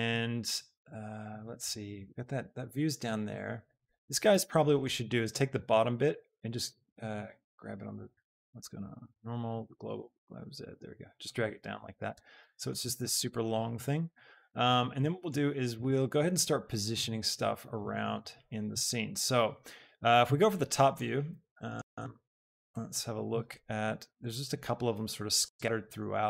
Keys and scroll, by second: 6.0 alt+g, 6.3 z, 7.1 Escape, 10.0 g, 10.4 z, 12.2 Tab.